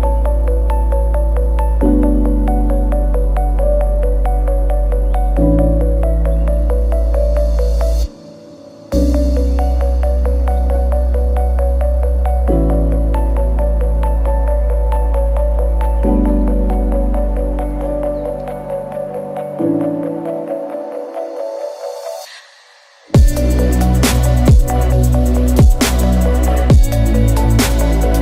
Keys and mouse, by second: 1.3 click, 2.0-3.4 drag, 3.7 ctrl+z, 5.1 click, 5.8 ctrl+z, 6.5 shift+click, 7.1-8.7 drag, 9.9-11.4 drag, 11.6 ctrl+z, 11.9 ctrl+z, 12.7 ctrl+z, 13.0 click, 13.8 click, 14.4-14.9 drag, 16.0 shift+drag, 17.7 shift+drag, 19.6 a, 20.0 a, 22.2 g, 26.3 shift+click, 26.5 a, 27.3-28.2 drag.